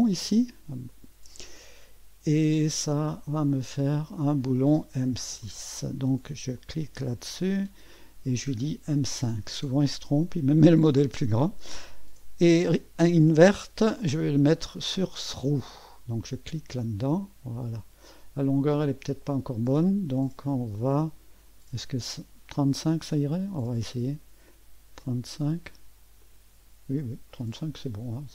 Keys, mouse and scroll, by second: 0.9 click, 3.5-4.7 drag, 5.4 click, 6.6 click, 7.4 click, 8.9 click, 13.6 click, 14.0 click, 15.0 click, 16.4 click, 17.3-19.6 drag, 20.3 click, 23.2 click, 24.5 click, 25.4 click, 26.3 click, 27.3-28.3 drag.